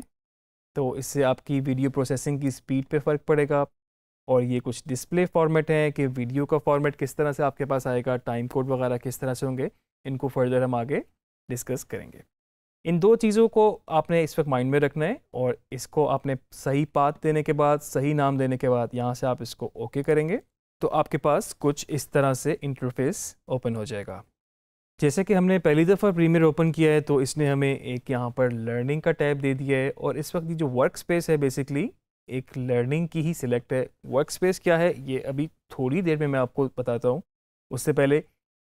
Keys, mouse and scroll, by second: 2.3 click, 19.9 click.